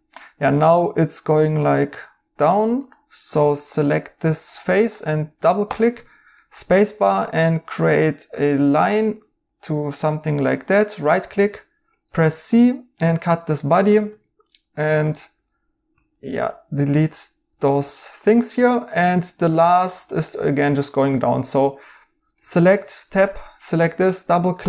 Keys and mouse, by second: 2.7 right click, 3.2 Tab, 6.0 right click, 6.8 right click, 6.8 a, 10.5 right click, 12.2 right click, 12.2 c, 14.0 Tab, 15.9 Tab, 16.9 x, 17.4 x, 18.0 x, 19.5 right click, 22.3 Tab, 22.8 right click, 24.5 a.